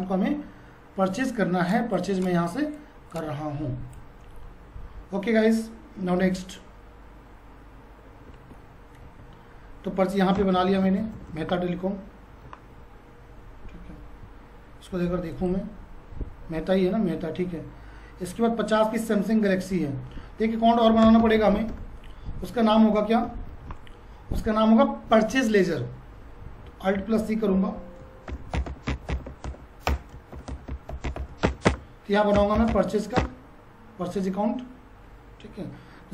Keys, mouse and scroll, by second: 1.7-6.2 drag, 6.2 F5, 9.0 F4, 15.3 click, 19.5 click, 21.0 Return, 23.5 ctrl+a, 26.6 ctrl+a, 27.0 alt+c, 28.0-30.3 typing.